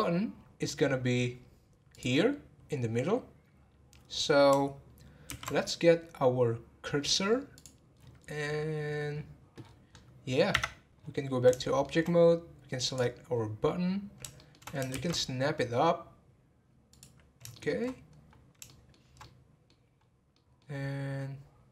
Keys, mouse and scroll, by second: 1.9 click, 8.2-9.0 scroll down 16, 9.6-10.0 scroll up 7, 10.5 Tab, 11.0-11.4 scroll down 6, 11.6-12.8 shift+middle drag, 12.8 click, 14.3 shift+middle click, 14.9 shift+s, 17.5-17.8 shift+middle drag, 17.8-18.4 scroll up 9, 18.7-20.0 shift+middle drag, 20.0 scroll down 1, 20.3-21.7 middle drag.